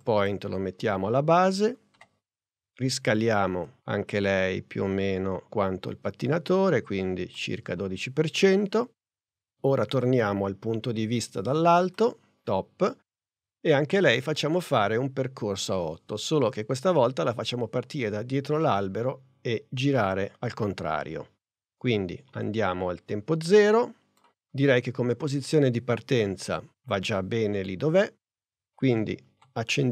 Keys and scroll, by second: 2.0 s, 29.3 p.